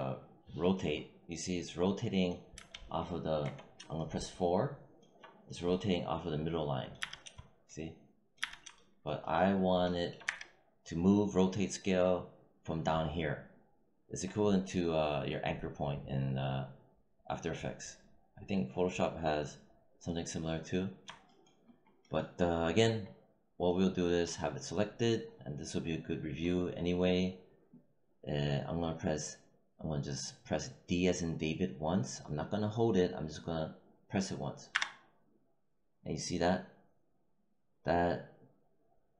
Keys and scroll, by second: 2.5 z, 3.3 4, 6.9 z, 8.3 z, 10.1 w, 34.6 d.